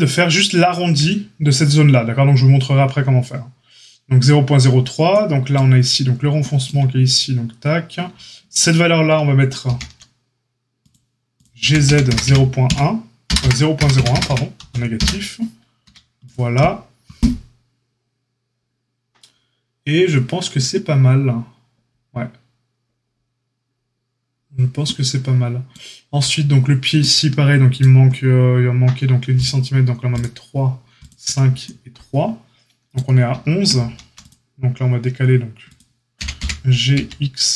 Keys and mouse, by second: 9.6 ctrl+r, 11.6 g, 15.8 a, 30.1 click, 33.7 ctrl+r, 36.1 g.